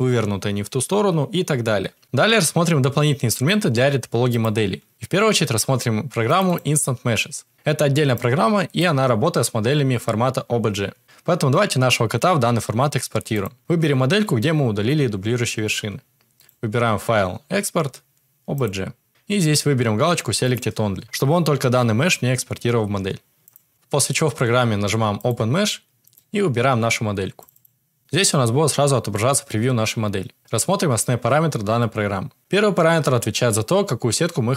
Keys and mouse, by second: 13.3 click, 16.4-18.7 drag.